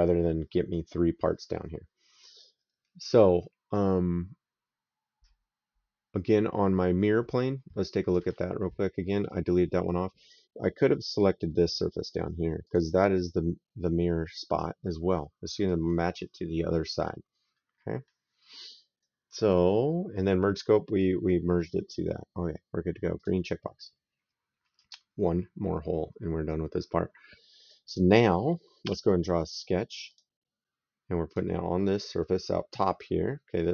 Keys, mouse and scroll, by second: 7.9 click, 9.1 right click, 12.5 click, 15.5 right click, 17.4 middle click, 18.3 right click, 23.0 click, 24.7 right click, 28.7 s, 29.9 click, 31.1 click.